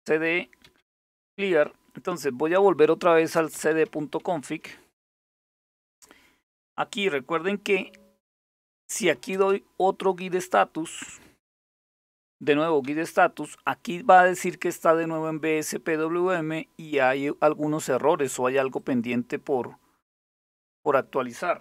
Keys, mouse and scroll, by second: 0.0-1.3 typing, 2.4-5.2 typing, 8.3-9.3 typing, 10.6-13.0 typing, 13.6 Return, 18.4-20.5 drag.